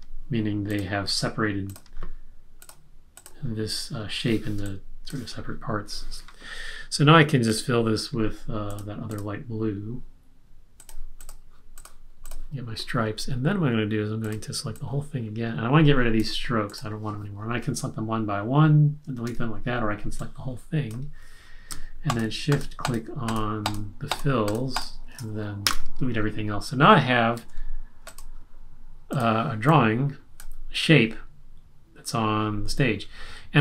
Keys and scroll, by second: 4.5 space, 19.2 BackSpace, 25.6 BackSpace, 27.3 BackSpace, 27.3 super+-.